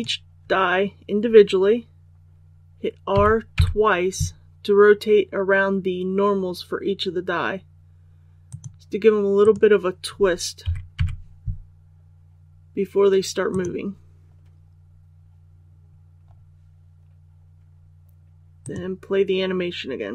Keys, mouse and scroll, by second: 3.1 r, 3.5 r, 8.4 click, 9.4 right click, 10.5 r, 10.9 r, 13.4 click, 15.2 scroll down 1, 16.2 scroll up 1, 18.5 click.